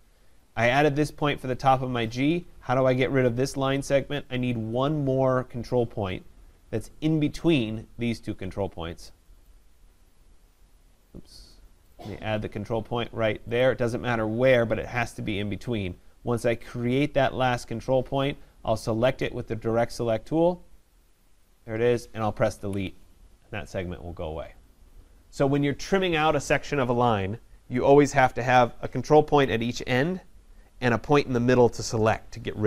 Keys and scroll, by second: 22.5 Delete.